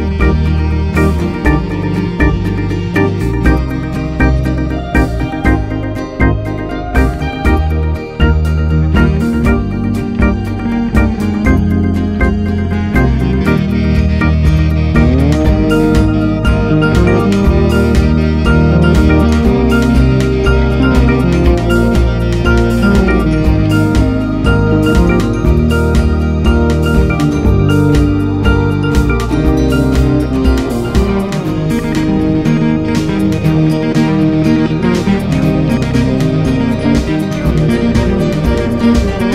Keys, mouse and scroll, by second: 0.3 g, 2.4 s, 7.3 shift+d, 10.1 click, 11.0 KP_Divide, 12.2 Tab, 12.3-13.6 right drag, 13.6-16.2 drag, 18.5 click, 19.5-20.9 drag, 20.9 Tab, 21.8-23.9 drag, 23.9 Tab, 24.3 s, 28.2 scroll down 2, 28.8 Tab, 31.7 i, 33.1-35.2 drag, 36.5-37.7 drag, 38.8 click.